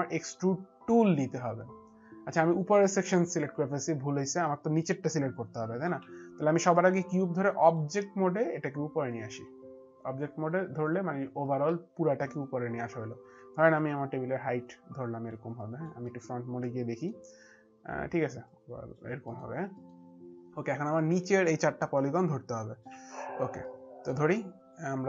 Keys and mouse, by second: 3.8 alt+click, 7.6 alt+click, 9.1 click, 11.8 alt+click, 13.8 alt+click, 15.5 alt+click, 16.1 middle click, 16.8 middle click, 18.5 click, 19.2 middle click, 22.9 middle click, 22.9 alt+click, 23.7 alt+middle click.